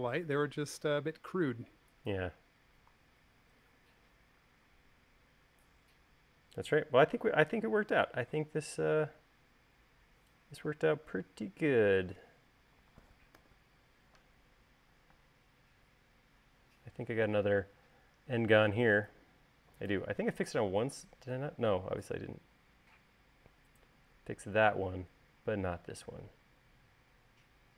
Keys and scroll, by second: 14.2 u, 16.0 space, 26.8 l.